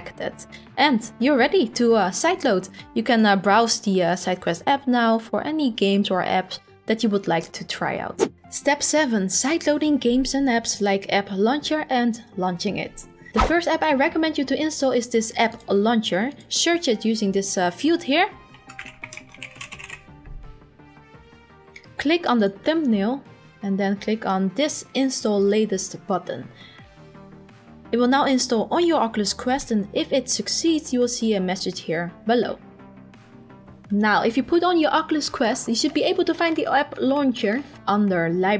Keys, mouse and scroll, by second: 3.1-4.2 drag, 4.2-5.4 scroll, 5.4-7.1 scroll, 7.2-8.0 scroll, 16.4 click, 18.4-20.3 typing, 21.9-23.0 scroll, 21.9-23.0 typing, 22.5 click.